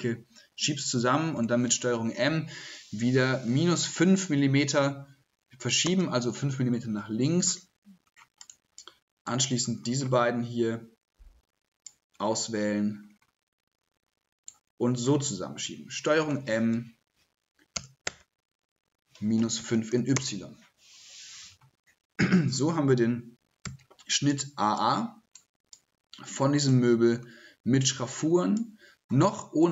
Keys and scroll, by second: 0.9 ctrl+z, 1.3 ctrl+m, 15.6 ctrl+m, 16.1 ctrl+m.